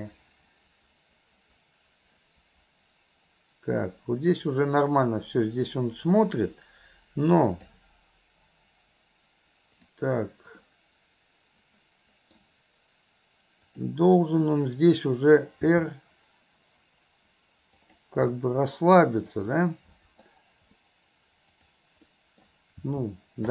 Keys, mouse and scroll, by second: 9.8 click, 10.7-12.4 middle drag, 13.7 click, 18.4-20.3 middle drag, 21.6 click, 22.1-22.5 middle drag.